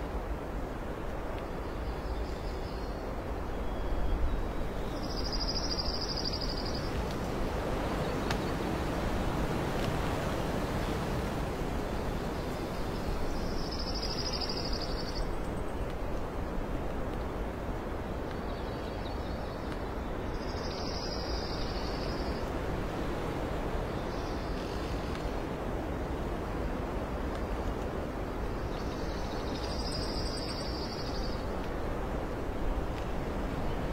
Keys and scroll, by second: 10.6 ctrl+alt+s, 11.0 ctrl+alt+space, 12.2 space, 15.6 alt+space, 18.0 space, 18.7 space, 20.5 alt+space, 21.0 ctrl+z, 22.0 alt+space, 23.5 alt+space, 27.5 space, 30.1 space, 31.6 ctrl+z, 32.6 space, 33.3 space.